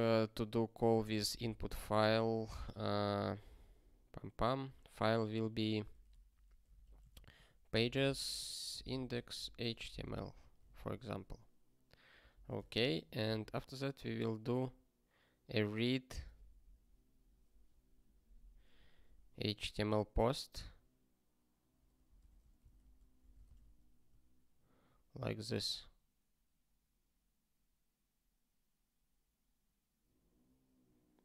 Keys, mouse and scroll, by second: 0.0-2.6 typing, 2.1 Return, 6.4-10.7 typing, 11.0 ctrl+e, 12.3 ctrl+b, 12.7 alt+shift+s, 13.2 ctrl+n, 18.9 ctrl+b, 19.1 ctrl+b, 22.2 alt+BackSpace, 22.7 ctrl+s, 23.2 BackSpace, 23.5 ctrl+s.